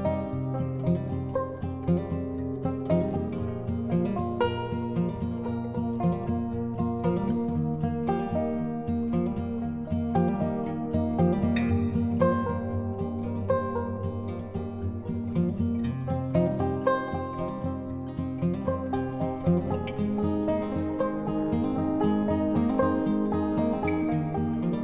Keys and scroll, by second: 23.6 ctrl+i.